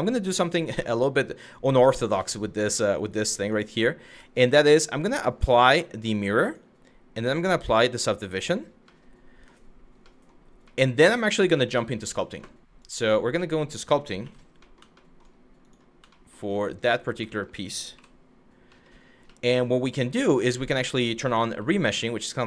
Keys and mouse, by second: 0.4-1.4 middle drag, 1.8-2.1 middle drag, 2.9 Tab, 3.0 click, 3.7 Tab, 5.6-6.2 drag, 6.9-7.9 drag, 8.5-9.2 middle drag, 9.7 middle drag, 10.4 middle drag, 11.0 middle drag, 12.5 click, 13.1 middle click, 13.8 f, 15.8 middle click, 16.5 middle click, 17.0 shift+middle click, 17.6 KP_Divide, 18.4 middle click, 19.0 middle click, 21.1 r.